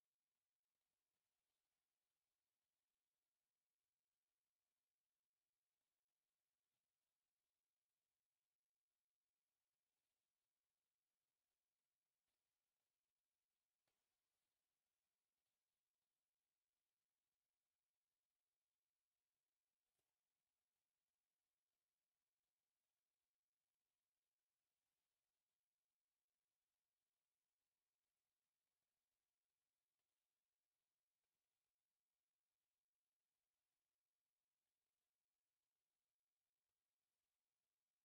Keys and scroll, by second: 0.4 F8, 2.7 Escape, 4.1 Escape, 4.7 s, 4.8 space, 5.9 1, 7.4 Escape, 9.4 c, 10.0 Escape, 12.7 Escape, 15.2 o, 15.5 Return, 17.8 1, 19.1 Escape, 31.7 Escape, 31.8 e, 32.0 space, 32.4 Escape, 32.5 space, 32.9 Escape, 33.2 s, 35.4 1, 35.6 Escape, 36.0 u, 36.2 space.